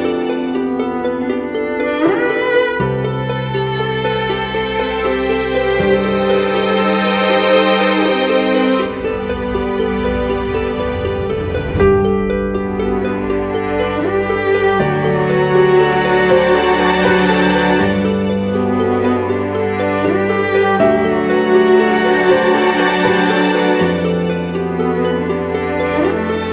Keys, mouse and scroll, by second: 6.2 ctrl+click, 10.3 alt+click, 17.4 ctrl+d, 19.3 double click.